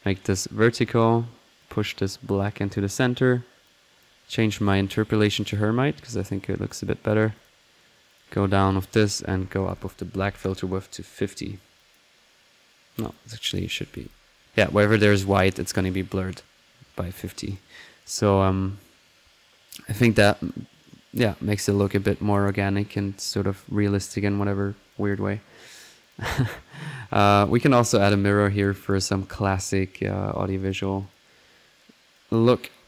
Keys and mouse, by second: 0.3-0.7 drag, 1.6-2.8 drag, 3.6 click, 4.6 click, 5.4 click, 6.7-7.8 drag, 8.1 click, 8.7-9.8 drag, 11.7 click, 12.9 drag, 13.4 click, 17.1 click, 19.8 middle click, 20.4 click, 21.7 click, 24.7 middle click, 24.9 click, 26.0 click, 26.3-27.1 drag, 27.1 right click, 27.1 click, 27.2 right click, 27.3 click, 27.4 right click, 28.7-29.5 typing, 29.0 drag, 29.6 click, 30.1 middle click, 30.6 click, 32.1 click.